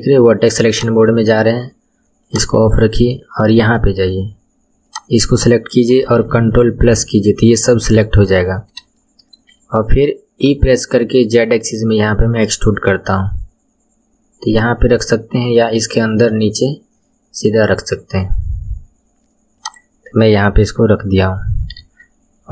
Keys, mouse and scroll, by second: 0.7 click, 1.1 middle click, 1.4 scroll up 1, 1.6 scroll down 1, 2.0 KP_1, 2.2 click, 2.6-3.9 middle drag, 3.9-4.3 scroll up 3, 4.9 click, 6.9 ctrl+KP_Add, 8.0 KP_1, 8.9-10.4 shift+middle drag, 10.4 e, 21.8 Tab.